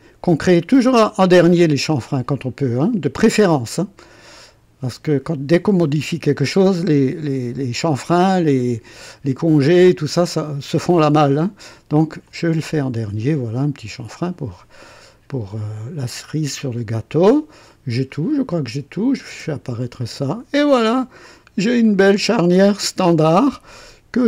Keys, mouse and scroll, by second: 12.2 click, 13.8 click, 14.6 scroll down 1, 15.3-17.4 drag, 18.0-18.3 scroll down 1, 19.0 click, 19.3 space, 20.0 click, 20.7-24.2 drag.